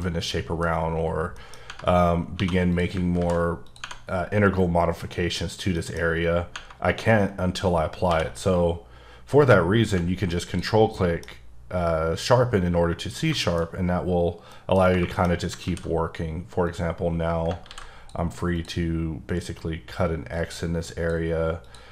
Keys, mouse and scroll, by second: 0.0 middle click, 0.7-1.1 scroll up 1, 1.1 scroll down 2, 1.3 middle click, 1.5 scroll up 1, 1.7 Tab, 2.3 2, 2.7 click, 3.2 ctrl+b, 3.6 click, 5.8 middle click, 6.0-6.4 scroll up 2, 7.8 scroll down 2, 8.0 q, 10.4 ctrl+click, 10.9 middle click, 11.3-11.7 scroll up 1, 13.3 shift+middle click, 14.8 Tab, 15.0 shift+middle click, 15.3 scroll up 1, 15.6 alt+w, 16.6 click, 17.7 ctrl+x, 18.5 click, 20.3 click, 21.6 click.